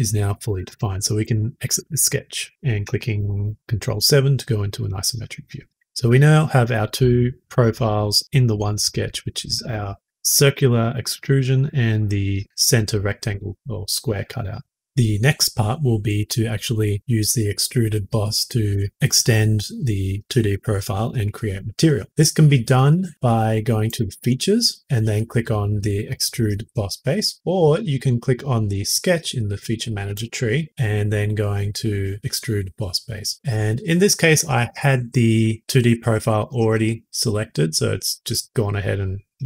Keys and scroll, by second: 3.1 ctrl+7.